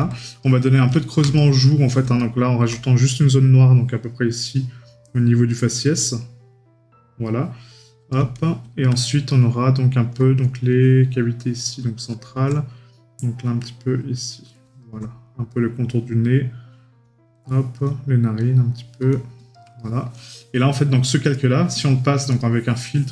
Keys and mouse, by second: 1.4 right click, 9.3 right click, 19.8 right click, 21.3 right click, 22.8 right click.